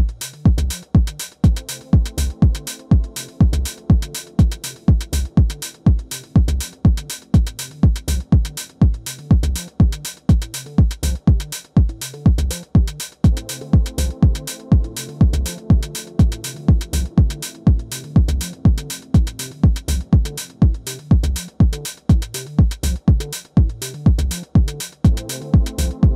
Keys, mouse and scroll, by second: 0.7-2.6 drag, 3.0 g, 10.0-11.9 middle drag, 11.3 Tab, 13.2-14.3 drag, 14.4 KP_3, 15.4-17.2 middle drag, 16.5 Tab, 17.7-19.5 right drag, 18.6-20.4 middle drag, 20.2 g, 24.1-26.1 middle drag, 25.7-26.1 drag.